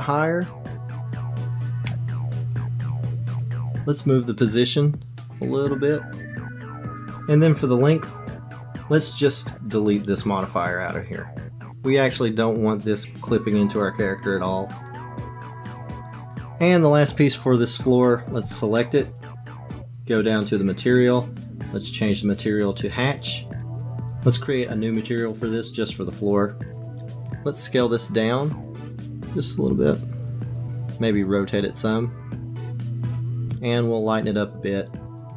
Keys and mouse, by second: 2.8 click, 3.3 click, 4.3-6.9 drag, 15.6 click, 18.5 click, 20.5 click, 21.8-23.8 drag, 25.9 click, 27.3-30.6 drag, 31.2-33.6 drag.